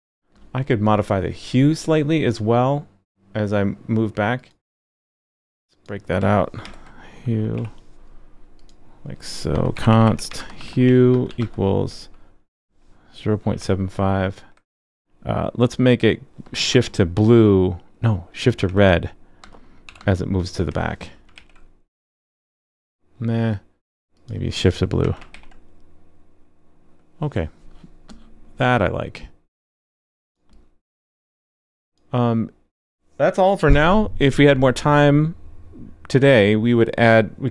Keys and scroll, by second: 6.6 super+x, 12.0 super+v, 21.3 super+s, 25.3 super+s.